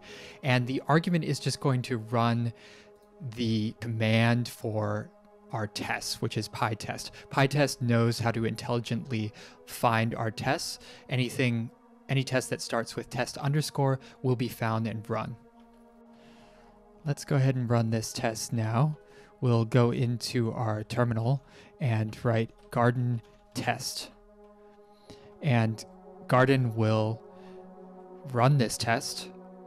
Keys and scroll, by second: 17.6 Print, 18.1 ctrl+`, 20.8-24.4 typing, 24.0 Return.